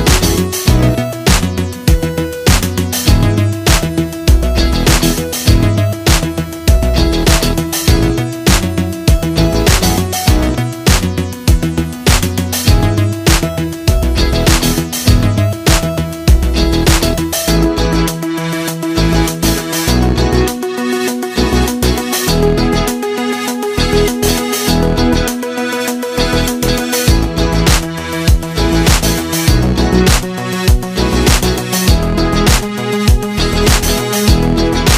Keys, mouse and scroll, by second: 0.3 ctrl+z, 2.6-5.4 drag, 5.4-13.4 shift+drag, 14.4 ctrl+z, 20.0 click, 32.5-34.9 drag.